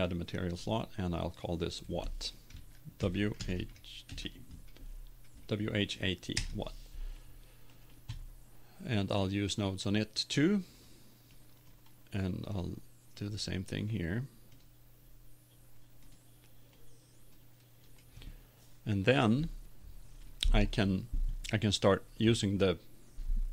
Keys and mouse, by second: 1.0-6.3 drag, 22.2-23.5 middle drag.